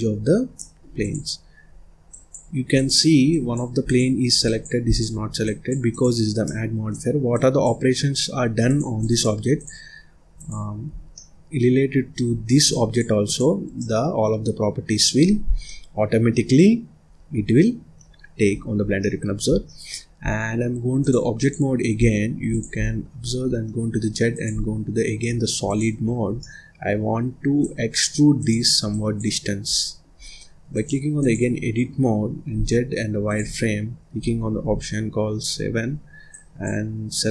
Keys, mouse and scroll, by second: 0.1-0.5 scroll up 3, 0.5 middle click, 0.9 click, 1.4-2.0 scroll up 1, 2.0 click, 2.7 click, 3.2 click, 3.8 click, 4.8 click, 5.8 click, 6.4 middle click, 7.3 click, 8.6 click, 8.9 click, 9.4 click, 10.3 click, 10.8 scroll down 1, 11.0 middle click, 11.8-12.6 scroll up 1, 12.6 click, 13.1 click, 13.7-15.0 middle drag, 15.0-15.4 scroll up 1, 15.4 scroll down 1, 15.6 middle click, 16.4-18.0 scroll up 2, 18.8 scroll down 1, 18.9 middle click, 19.4 scroll down 1, 19.6 middle click, 20.1-20.9 scroll up 1, 20.9-21.9 drag, 21.9-22.4 scroll down 1, 22.4 click, 23.3 z, 25.2-25.5 scroll down 2, 25.5 click, 25.9 scroll up 2, 26.2 scroll down 1, 26.3-27.5 middle drag, 27.5 click, 28.3 click, 28.8 click, 29.6-30.6 middle drag, 30.6-32.4 drag, 32.4 z, 34.5 KP_7, 35.8-36.2 scroll up 1, 36.2 click.